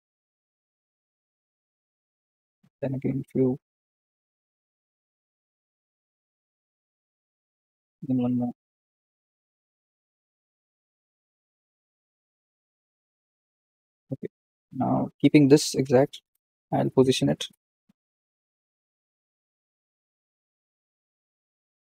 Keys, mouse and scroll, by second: 0.6 r, 2.7 shift+d, 5.3 r, 8.1 shift+d, 9.8 r, 14.3 scroll up 3, 16.3 click, 16.8 scroll up 2, 17.4 KP_3, 17.8 scroll down 2, 18.6 g.